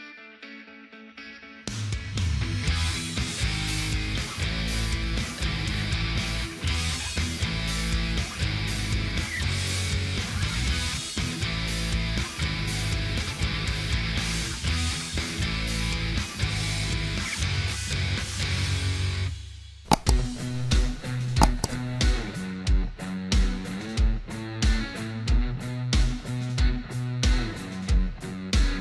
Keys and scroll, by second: 11.2 ctrl+z, 13.5 ctrl+z, 20.5 Up, 20.9-21.3 typing.